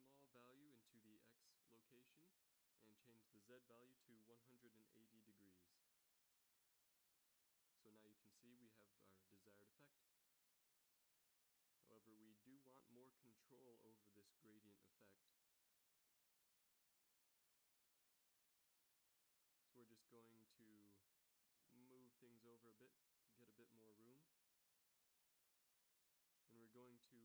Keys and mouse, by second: 2.5-4.6 drag, 6.6 shift+z, 19.3 z, 19.4 z, 22.8 g, 24.2 a, 24.4 b, 24.6-25.0 drag, 26.3 g.